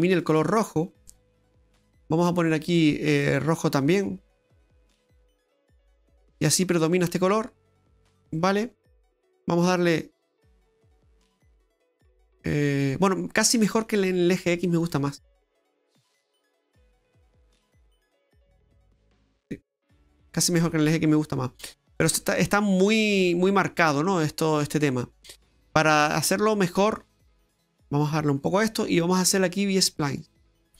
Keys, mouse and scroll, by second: 0.1 click, 1.3 click, 2.7 click, 3.1 click, 6.4 middle click, 7.8 click, 8.0-8.3 scroll down 5, 8.3 middle click, 8.8-9.6 scroll down 2, 9.6 click, 12.5 middle click, 13.9 click, 14.8 click, 16.0 click, 19.4 middle click, 22.5 middle click, 25.0 middle click, 27.4 click, 29.1 click.